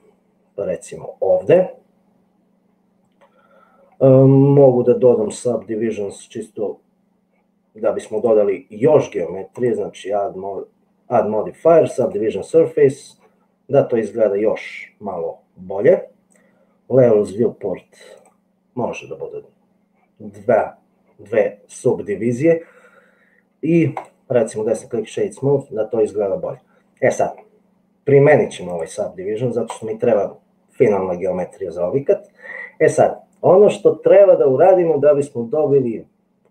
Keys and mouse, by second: 10.1-12.8 drag, 24.3-25.4 right drag, 29.0-30.0 drag.